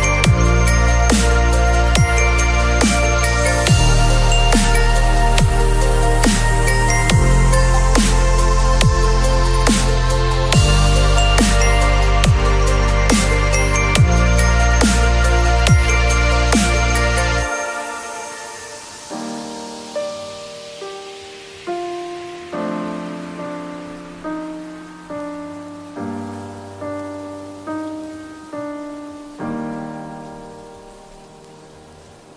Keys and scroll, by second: 9.5 space, 15.9 ctrl+[, 16.4 b, 18.1 [, 28.3 ].